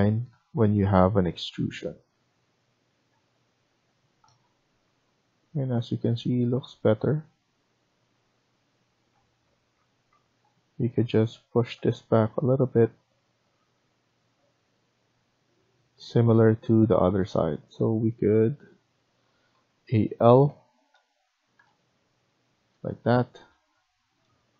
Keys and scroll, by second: 3.8 Escape, 10.0 Escape, 10.8 Escape, 16.2 Escape, 19.4-20.4 typing.